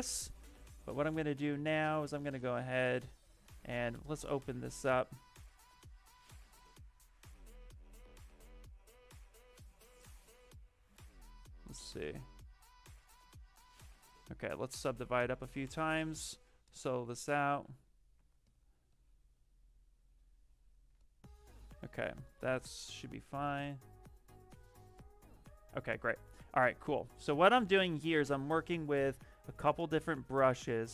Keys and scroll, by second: 13.8 ctrl+z, 15.2 ctrl+d, 15.4 ctrl+d, 15.6 ctrl+d, 15.8 ctrl+d, 16.9 s, 17.5 s, 20.8 s, 26.2 ctrl+z.